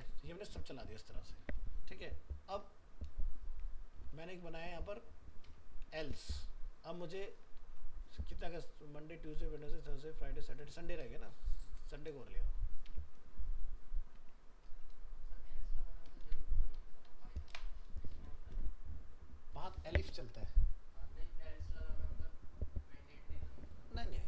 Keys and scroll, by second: 16.2 ctrl+s.